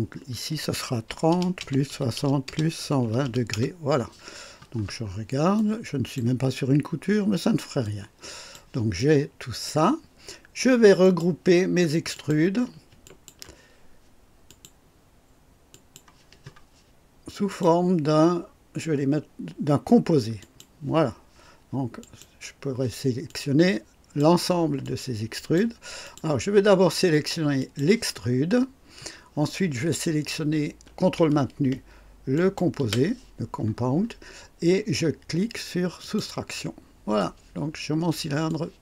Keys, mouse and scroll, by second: 1.0-3.2 typing, 1.6 KP_Add, 2.4 KP_Add, 3.5 KP_Enter, 5.0 scroll down 1, 5.5-6.3 drag, 7.8-8.7 drag, 8.9-9.8 drag, 11.0 click, 12.1 click, 13.0 shift+click, 14.4 click, 15.7 click, 17.5 click, 20.4 click, 22.0 click, 23.2-24.3 drag, 24.8-25.7 drag, 26.0 click, 27.6 click, 32.3 ctrl+click, 36.0 click, 37.2 click, 38.4-38.8 drag.